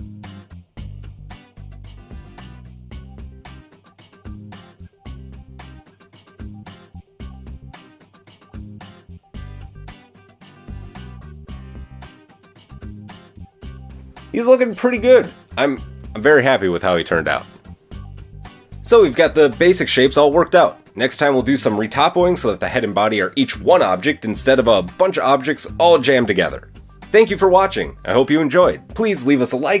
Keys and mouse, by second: 6.3 Tab, 7.5 a, 7.7 a, 7.7 c, 9.1 Tab, 9.4 Tab, 9.5 Tab, 10.6-11.6 middle drag, 10.6 right click, 11.6 click, 11.8 middle click, 12.2-14.4 drag, 14.4-29.8 middle drag.